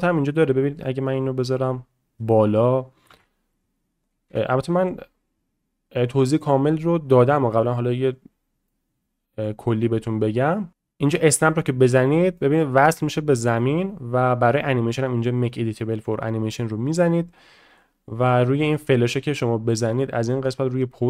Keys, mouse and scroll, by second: 0.8 shift+middle click, 1.6-2.1 drag, 3.1 shift+a, 4.3 s, 8.7-9.4 middle drag, 11.3 click, 12.4 middle click, 13.3 shift+middle click, 13.6 shift+middle click, 14.4 click, 15.8 middle click, 16.6-17.0 shift+middle drag, 17.7 click, 18.8 click, 20.1-20.8 drag.